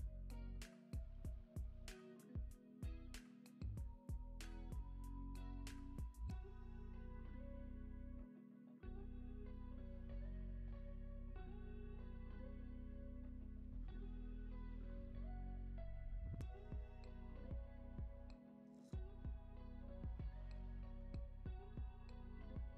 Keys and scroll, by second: 1.8 super+s, 9.9 super+s, 11.6 alt+w.